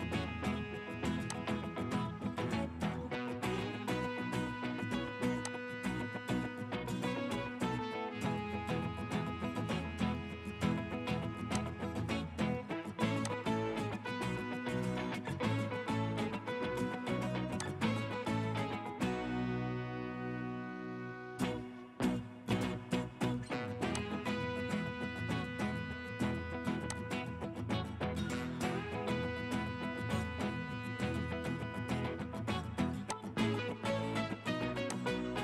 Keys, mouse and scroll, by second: 2.6 scroll down 1, 14.8 scroll down 1.